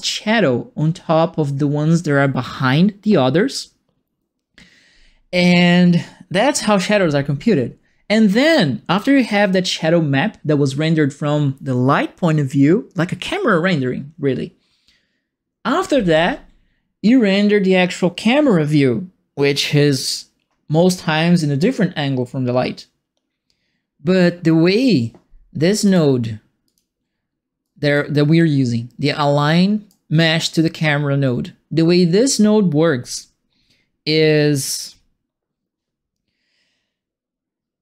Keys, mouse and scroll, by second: 25.8 click, 26.6 click, 27.6 right click, 29.0 middle click, 29.8 right click.